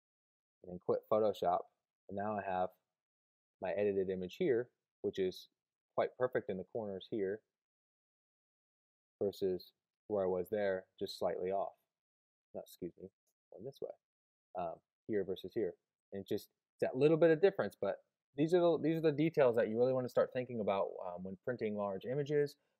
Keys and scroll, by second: 0.7 super+q, 9.2 Left, 12.3 Right, 14.9 Left, 15.6 Right, 16.3 Left.